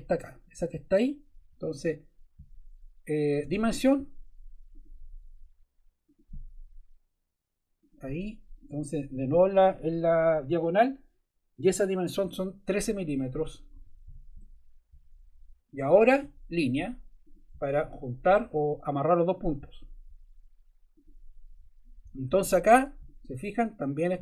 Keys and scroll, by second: 3.4 d, 13.7 1, 14.0 3, 14.3 Return, 22.1 Escape.